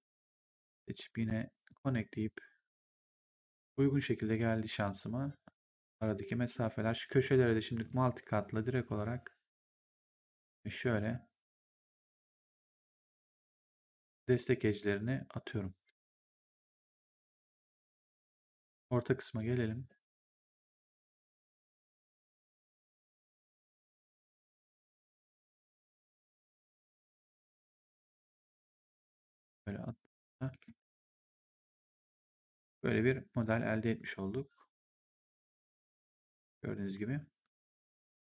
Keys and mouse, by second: 0.4 click, 1.6 click, 3.3 w, 7.8 click, 9.6 ctrl+click, 10.7 ctrl+click, 13.5 ctrl+click, 17.2 ctrl+click, 25.1 ctrl+click, 27.0 ctrl+click, 30.0 ctrl+click, 30.4 w, 30.9 right click, 31.7 3, 32.1 click, 35.0 click, 37.3 ctrl+1.